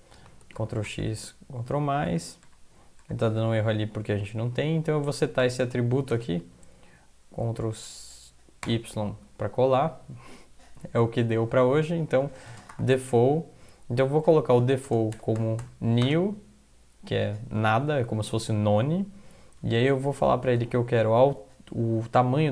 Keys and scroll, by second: 0.6 ctrl+x, 0.9 ctrl+=, 1.0 ctrl+=, 1.2 ctrl+=, 2.1 ctrl+=, 3.6 Up, 3.8 Up, 4.0 Up, 4.1 Up, 4.4 End, 4.7 Left, 5.6 space, 8.6 ctrl+y, 12.0-13.6 typing, 14.9-16.1 typing, 20.5 typing.